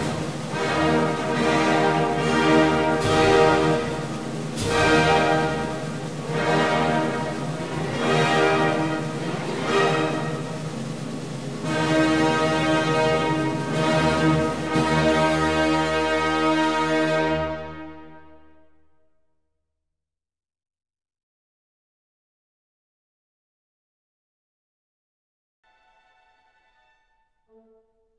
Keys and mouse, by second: 2.4 click, 2.8 ctrl+r, 4.9 ctrl+r, 6.8 click, 6.9 ctrl+r, 8.6 click, 10.3 ctrl+r, 12.3 click, 12.6 ctrl+r, 15.2 ctrl+r, 17.3 click, 17.6 ctrl+r, 19.3 click, 20.0 Tab, 22.4 Tab.